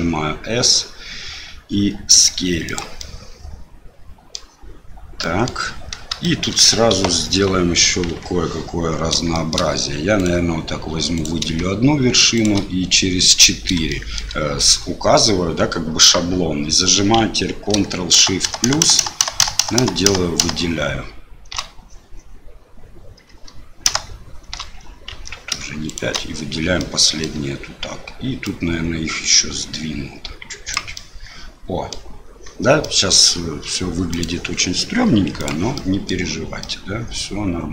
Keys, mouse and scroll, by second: 3.1-4.3 middle drag, 5.3 middle click, 6.3 shift+middle click, 6.9 KP_7, 8.0 KP_3, 9.4 shift+middle click, 10.1 click, 11.1 click, 12.3 shift+click, 13.9 shift+middle click, 18.1 ctrl+shift+KP_Add, 18.4-19.0 ctrl+shift+KP_Add, 19.2 ctrl+shift+KP_Add, 19.4 ctrl+shift+KP_Add, 19.6 ctrl+shift+KP_Add, 19.8 ctrl+shift+KP_Add, 20.0 ctrl+shift+KP_Add, 20.4 ctrl+shift+KP_Add, 23.9 ctrl+shift+KP_Add, 25.1 ctrl+z, 25.8 shift+click, 26.7 click, 26.9 middle click, 28.5-30.9 drag, 31.1 middle click, 33.0 middle click, 34.1-35.6 drag, 35.9 middle click, 36.7-37.7 middle drag.